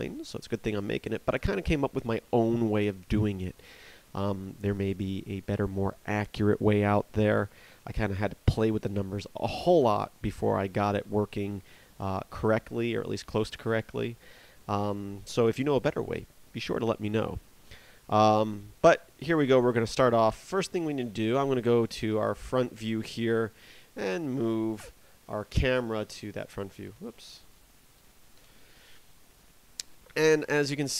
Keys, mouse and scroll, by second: 22.1 KP_1, 23.6 space, 27.1 space.